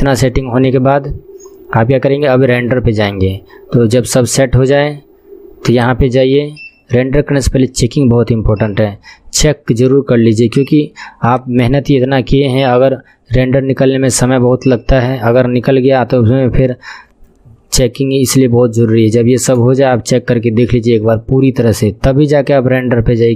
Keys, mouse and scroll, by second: 5.8-9.0 drag, 9.0 KP_0, 11.4-14.6 drag.